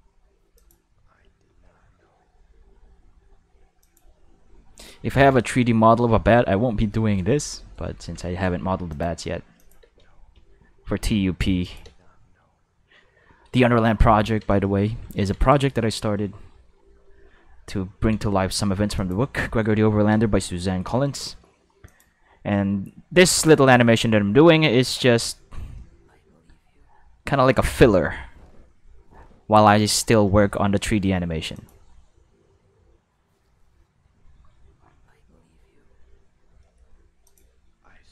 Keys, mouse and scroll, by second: 0.3 space, 0.5 click, 0.7 space, 3.6 space, 3.8 click, 4.0 space, 4.7 space, 5.1 ctrl+s, 7.2 shift+middle click, 8.2 ctrl+Tab, 8.9 click, 9.6 click, 9.8 space, 10.9 space, 11.6 click, 11.8 space, 13.2 space, 14.0 ctrl+middle click, 14.6 shift+middle click, 15.1 ctrl+middle click, 15.6 shift+middle click, 16.3-18.0 ctrl+middle drag, 18.4 shift+middle click, 18.9 click, 19.6 space, 20.1 space, 20.8 space, 21.2 space, 21.8 click, 22.7 space, 24.1-25.5 middle drag, 25.7 middle click, 29.1 middle click, 30.2 middle click, 31.2 space, 31.5 click, 31.8 space, 36.5 space, 36.6 middle click, 37.2 click, 37.4 space.